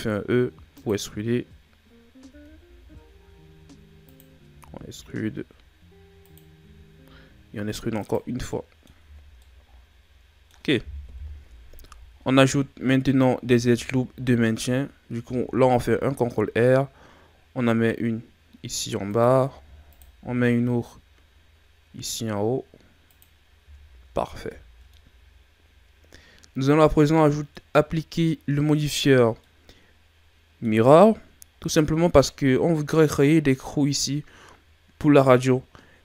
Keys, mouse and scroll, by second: 2.3 e, 4.5 e, 6.6 e, 8.3 scroll down 3, 8.5 middle click, 9.0 Tab, 9.4-11.0 middle drag, 11.0 KP_1, 11.9-12.2 ctrl+scroll up 1, 12.6-13.5 scroll up 2, 13.5 Tab, 15.2 ctrl+r, 19.7 ctrl+r, 23.7 Tab, 24.1 a, 24.4 scroll down 4, 25.0-27.9 middle drag, 29.4-31.4 middle drag, 31.4-31.7 shift+scroll up 7, 32.2-33.3 middle drag, 33.3-36.0 scroll up 2.